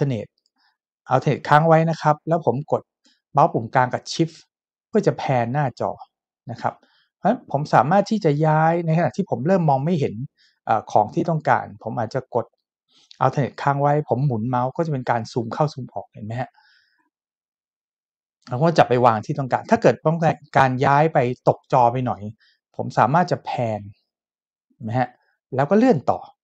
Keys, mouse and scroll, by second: 3.9 shift+middle click, 23.5 shift+middle click.